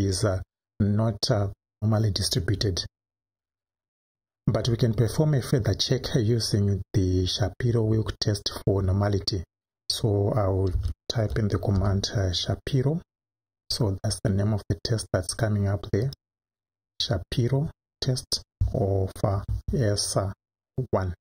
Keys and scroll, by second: 10.7 s, 11.2 h, 11.8 a, 19.3 shift+s.